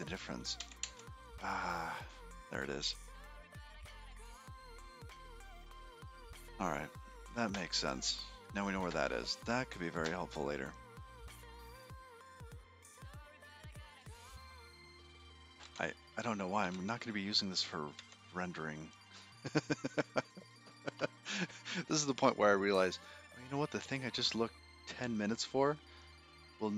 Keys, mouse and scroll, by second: 0.6 n, 1.5 n, 1.7 n, 4.3-4.8 scroll up 4, 7.3-8.2 scroll down 18, 8.8-9.4 scroll up 13, 11.6-14.7 scroll up 48, 14.7 click.